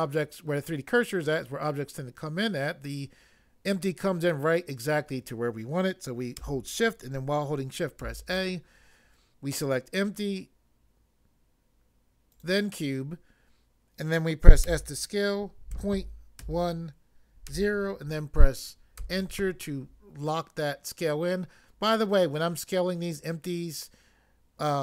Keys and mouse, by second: 8.0 a, 12.3 click, 14.6 s, 15.8 ., 16.4 1, 17.4 0, 19.0 Return.